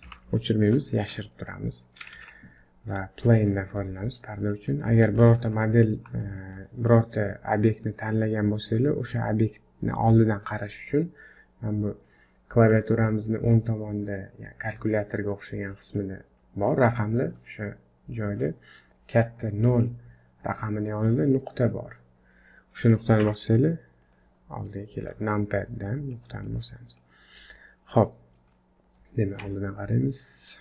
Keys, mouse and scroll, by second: 0.1 h, 0.6-1.1 scroll up 4, 1.2 shift+middle click, 2.1 shift+a, 3.4 middle click, 4.7 middle click, 5.2 shift+middle click, 5.5 middle click, 6.2 shift+middle click, 6.9 middle click, 23.2 KP_Decimal, 24.6 middle click, 26.1 middle click, 26.6-27.0 scroll up 1, 27.0 middle click, 28.2-29.1 scroll down 3, 29.1 scroll down 1, 29.4 KP_1, 30.2 middle click.